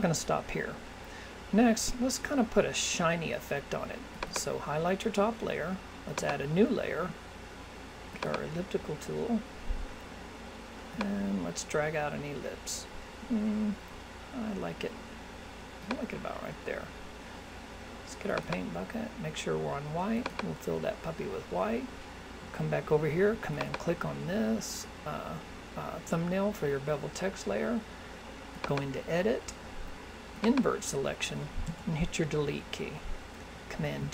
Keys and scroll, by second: 33.8 super+d.